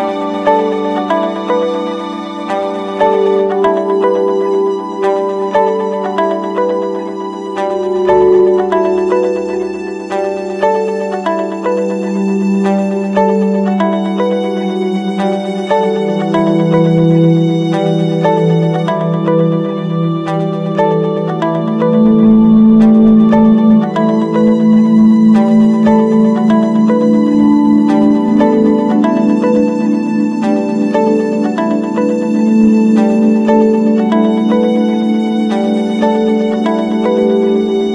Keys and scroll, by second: 13.3 ctrl+-, 14.0 ctrl+space, 31.7 ctrl+z.